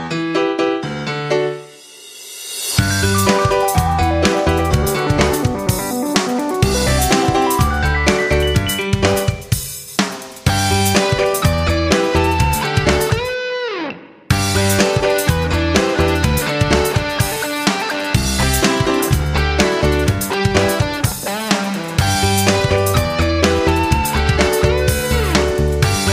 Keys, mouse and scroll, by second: 0.1 ctrl+g, 2.3 click, 9.9 F9, 10.1-24.3 drag.